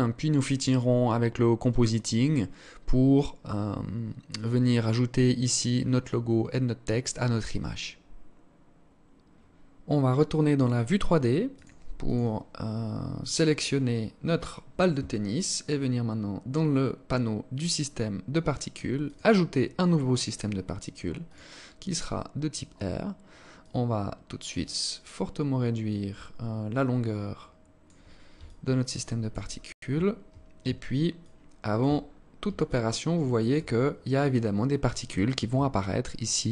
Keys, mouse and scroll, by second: 12.0 click, 13.1 right click, 15.5-15.9 scroll down 4, 17.5 click, 18.9 click, 21.1 click, 23.3 click, 28.1 alt+click, 29.3-29.8 scroll up 8, 30.8 alt+shift+click, 31.7 scroll up 3, 32.3 alt+click, 33.3 scroll up 1, 35.4 alt+click.